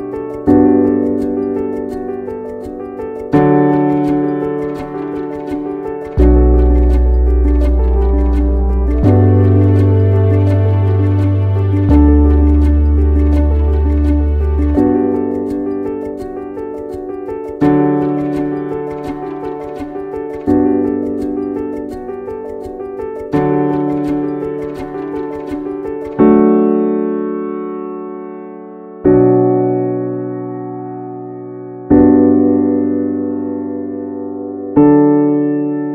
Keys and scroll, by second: 1.8 ctrl+v, 19.4 ctrl+z.